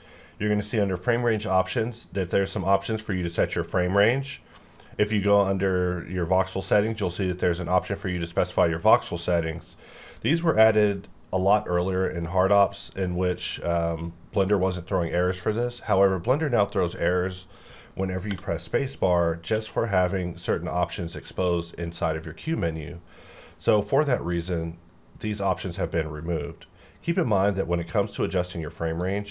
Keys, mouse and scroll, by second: 17.5 click, 17.6 click, 18.9 click, 19.5 q, 29.0 click.